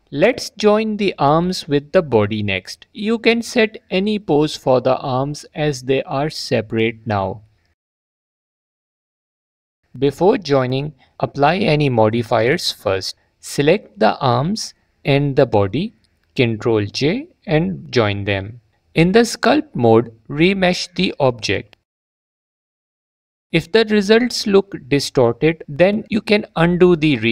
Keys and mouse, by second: 1.1 click, 1.2 click, 3.1 click, 5.5 drag, 6.3 s, 8.6 click, 11.9-12.3 drag, 14.4 click, 17.2 Tab, 20.4 shift+r, 24.3 ctrl+r.